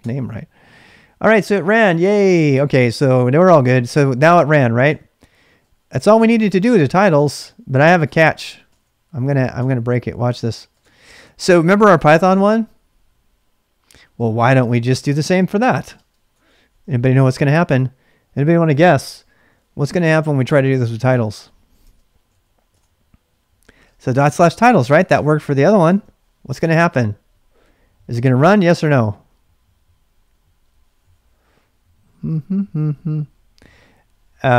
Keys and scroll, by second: 0.0-0.1 typing, 4.1-10.8 typing, 13.8-17.4 typing, 20.2-22.2 typing, 22.7 Return, 23.5-25.8 typing, 25.8 Tab.